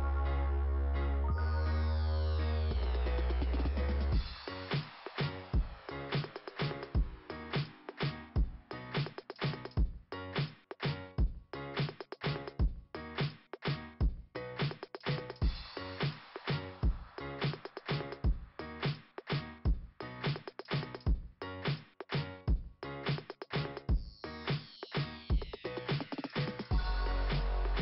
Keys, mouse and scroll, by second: 0.1 click, 1.7 click, 3.6-4.0 scroll down 2, 4.4 scroll down 1, 6.5 right click, 7.3 click, 7.5 click, 12.9 click, 15.4 click, 17.1 click, 19.6 click, 20.7 click, 22.4 click, 23.7 click, 25.1 scroll up 2, 27.1 scroll up 2.